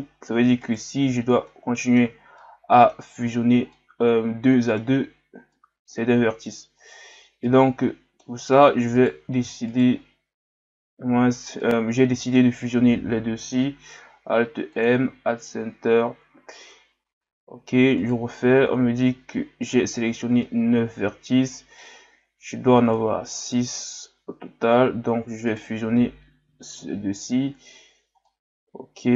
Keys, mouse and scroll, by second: 0.6 right click, 1.5-3.3 middle drag, 3.3-3.6 scroll up 3, 3.7-6.7 middle drag, 6.7-7.4 scroll down 2, 7.4-8.5 middle drag, 8.5-9.0 scroll up 1, 9.0 right click, 9.7 shift+right click, 11.6-13.4 middle drag, 13.4 m, 15.9-16.9 scroll down 2, 16.9-18.0 scroll up 1, 18.0 alt+right click, 20.4-21.9 middle drag, 21.9-22.5 scroll up 2, 22.9 right click, 25.5 shift+right click, 26.5 m, 28.3-29.1 middle drag.